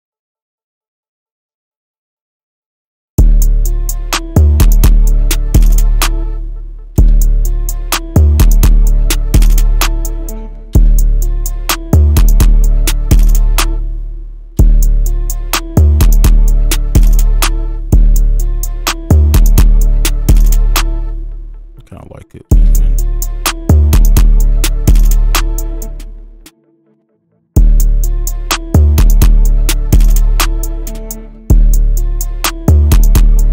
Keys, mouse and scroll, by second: 3.2 space, 6.2 space, 6.7-7.0 alt+scroll up 2, 7.0 space, 7.4 ctrl+click, 7.7-10.1 ctrl+alt+scroll up 2, 10.2 alt+scroll down 1, 10.7 space, 10.9 right click, 11.2 ctrl+click, 14.6 space, 17.9 space, 18.4 double click, 21.0 space, 22.5 space, 22.8 right click, 25.8 space, 26.4 double click, 31.2 space, 31.5 space.